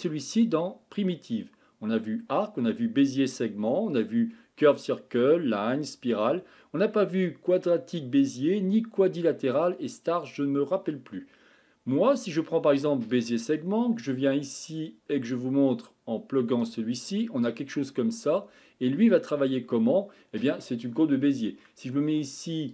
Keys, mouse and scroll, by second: 15.3-16.6 drag, 17.1-17.8 middle drag, 17.8-19.0 scroll up 10, 19.0-19.8 scroll down 3, 19.8-22.7 middle drag.